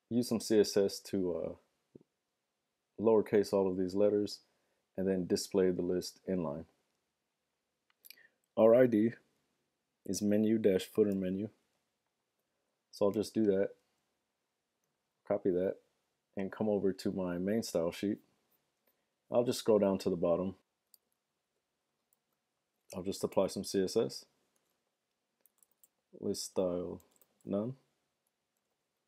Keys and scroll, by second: 11.3 super+c, 12.4 super+Tab, 20.9 super+v, 22.2-23.1 typing, 24.5-28.4 typing.